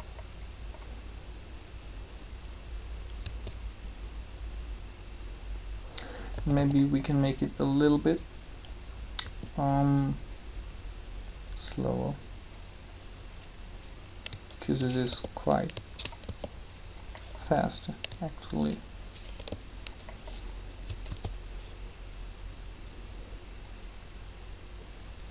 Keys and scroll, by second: 6.3 typing, 9.2 s, 15.1 shift+g, 16.2 shift+g, 19.3 g, 21.1 alt+a.